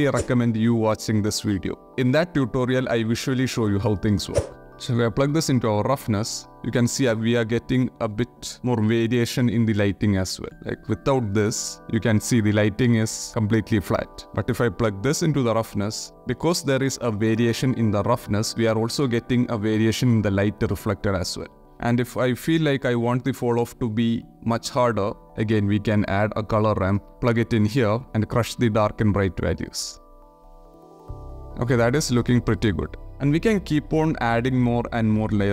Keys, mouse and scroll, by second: 4.5 click, 5.4 ctrl+shift+click, 9.9-10.4 shift+middle drag, 10.6 ctrl+middle click, 14.2-14.9 drag, 21.7 click, 23.8 shift+click, 24.0 shift+middle click, 24.6 shift+a, 27.7 drag, 28.5-30.5 drag, 30.6 click, 31.0 ctrl+shift+click, 31.4 ctrl+shift+click, 32.5 click.